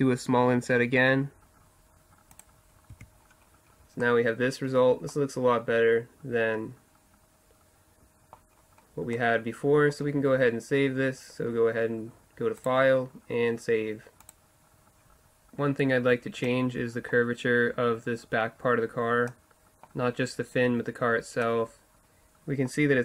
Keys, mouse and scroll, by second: 3.0 Tab, 3.2-5.4 middle drag, 5.7 middle drag, 7.0 middle click, 8.6-12.6 middle drag, 12.6-14.7 drag, 16.4-23.0 middle drag.